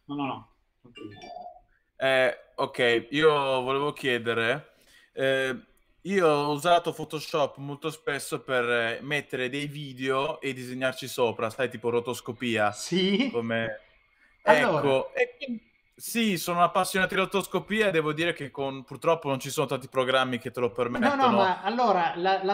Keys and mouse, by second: 10.4 middle click, 11.9 middle click, 14.8 middle click, 18.6 shift+middle click, 19.3 middle click.